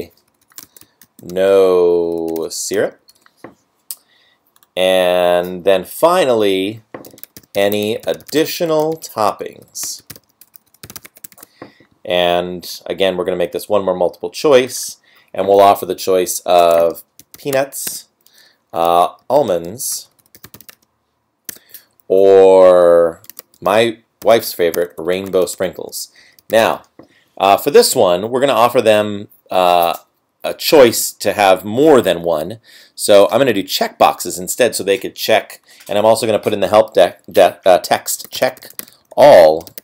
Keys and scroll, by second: 0.0-1.0 typing, 2.1 BackSpace, 7.6 space, 8.7-10.7 typing, 17.9 Tab, 20.0-24.7 BackSpace, 21.5 Tab, 24.9 space, 38.7 space, 39.1 space.